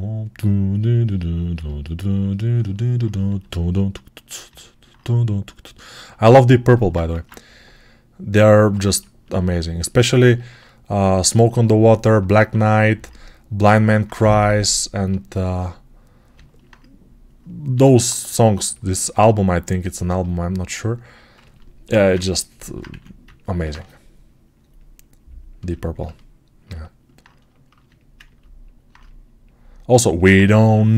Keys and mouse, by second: 1.2-4.3 alt+right drag, 3.1 s, 4.3-6.1 alt+middle drag, 6.1 right click, 7.0 ctrl+Tab, 8.6-11.3 ctrl+alt+middle drag, 11.3-14.8 alt+drag, 17.6 g, 18.5 alt+click, 19.8-28.7 ctrl+alt+right drag, 21.9 alt+q, 22.8 1, 29.8-30.9 right drag.